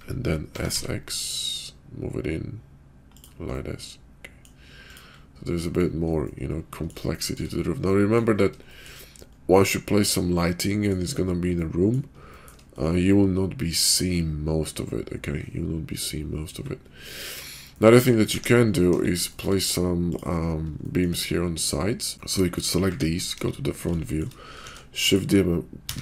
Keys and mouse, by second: 0.4 s, 3.5-4.5 drag, 5.5 click, 6.2 middle click, 7.1 shift+middle drag, 7.9 middle click, 8.7 shift+middle drag, 9.6-10.9 middle drag, 11.5-12.0 middle drag, 12.3 shift+middle drag, 12.7-16.5 middle drag, 17.7 shift+middle drag, 18.9 KP_5, 19.2 shift+middle drag, 20.9 shift+middle drag, 21.7 middle drag, 22.1 KP_5, 22.2-22.6 middle drag, 22.8 `, 23.3 KP_5, 24.0 shift+click, 24.6 shift+d, 25.8 q.